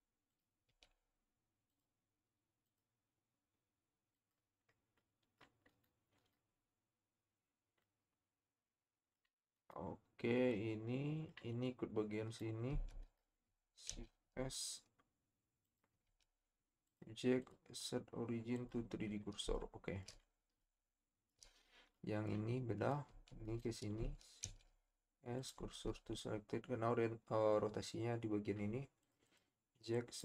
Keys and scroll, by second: 12.9 Tab, 13.5 shift+Tab, 13.9 shift+s, 16.1 Tab, 23.1 Tab, 24.4 shift+s, 25.7 Tab.